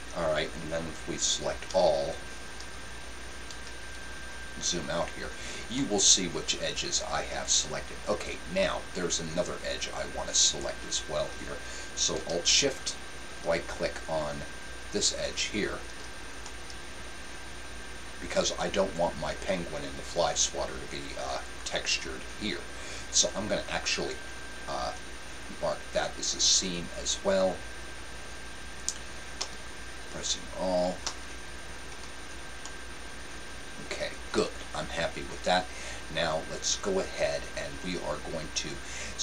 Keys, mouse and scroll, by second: 1.7 a, 2.6 a, 3.4 a, 4.1 middle click, 5.7-7.5 middle drag, 15.3-17.1 right drag, 16.4-18.2 middle drag, 26.7-28.7 drag, 29.3 a, 31.1 a, 31.9 a, 32.6-34.3 middle drag.